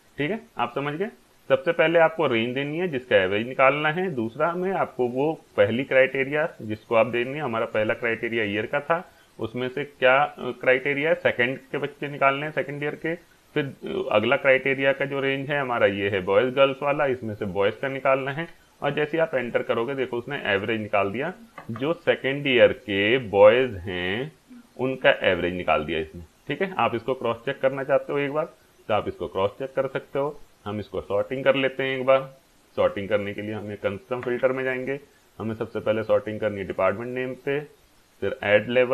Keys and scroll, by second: 18.8 Return.